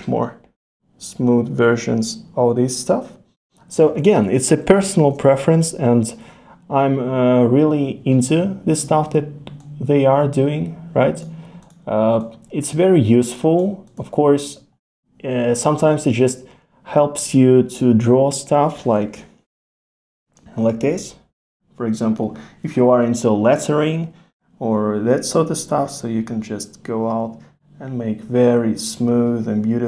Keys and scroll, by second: 4.0 super+z.